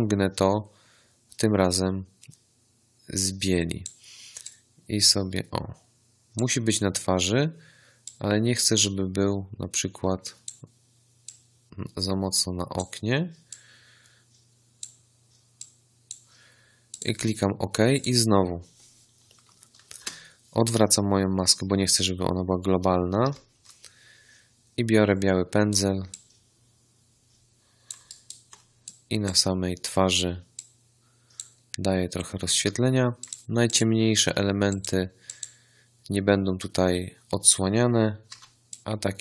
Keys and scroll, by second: 19.9 ctrl+i, 23.2 b, 38.2 x.